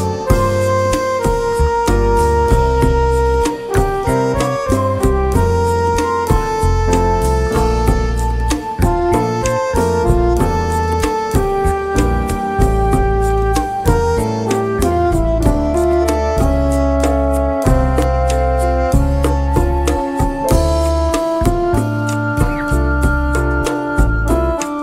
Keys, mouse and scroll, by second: 3.5 click, 6.7 click, 7.9 click, 8.8 click, 13.4 right click, 16.1 click, 16.6 click, 17.0 right click, 18.4 click, 19.5 click, 20.1 click, 21.5 click, 22.2 click, 23.2 click, 23.8 click, 24.4 click.